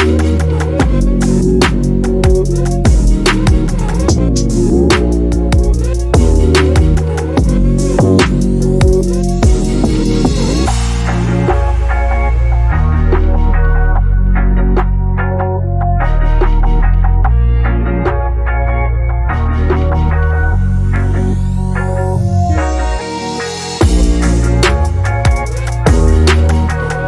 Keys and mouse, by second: 0.3 shift+Left, 0.3 space, 1.5 ctrl+space, 1.9 ctrl+s, 2.9 ctrl+s, 3.1 click, 3.3 click, 3.6 ctrl+z, 4.2 click, 5.0 click, 7.5 click, 8.2 shift+Left, 8.4 space, 11.9 ctrl+space, 12.1 shift+middle click, 12.5 shift+a, 13.7 Tab, 13.9-14.7 typing, 14.8 Tab, 14.9 shift+middle click, 15.2 click, 15.7 click, 16.1 s, 16.4 middle click, 16.8 space, 17.0-18.1 drag, 17.0 space, 18.2 s, 18.6 click, 19.0 click, 19.9 click, 20.3 click, 20.7 click, 22.5 s, 22.8 right click, 23.4 click, 23.7 shift+middle click, 23.9 click, 24.1 middle click, 24.2-26.1 typing, 24.5 click, 26.3 middle click, 26.6 click.